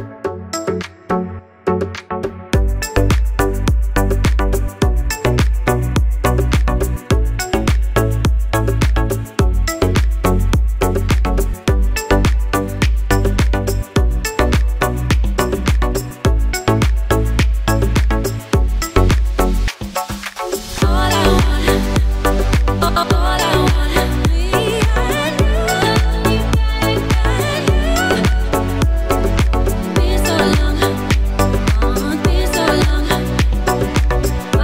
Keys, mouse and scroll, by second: 2.5 click, 4.0 click, 13.5-13.8 scroll up 1, 16.8 click, 23.2 click, 28.5 click, 31.1 scroll down 1, 32.2 click.